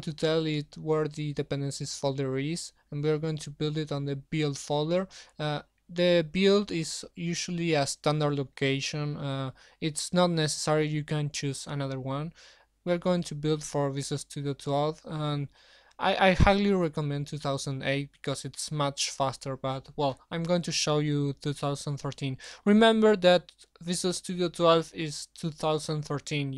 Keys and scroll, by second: 0.1 ctrl+v, 2.4 shift+Home, 2.6 ctrl+v.